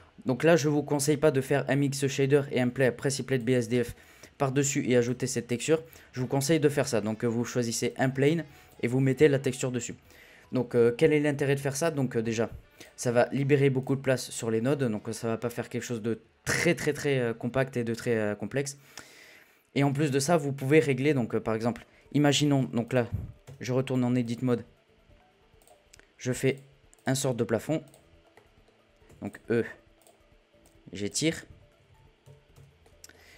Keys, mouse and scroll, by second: 3.7-5.0 middle drag, 5.0-6.1 drag, 6.1 scroll down 1, 6.2-7.1 middle drag, 7.1-7.8 scroll up 3, 7.8-9.7 drag, 9.7-11.4 scroll down 1, 11.4-12.7 scroll down 1, 12.7 click, 13.8 click, 22.8 click, 23.7 scroll down 3, 23.9 shift+middle click, 24.2 click, 25.5 click, 26.4 click, 26.9 click, 28.3 middle click, 29.0 e, 29.9 click, 32.8 middle drag, 33.1 scroll up 1.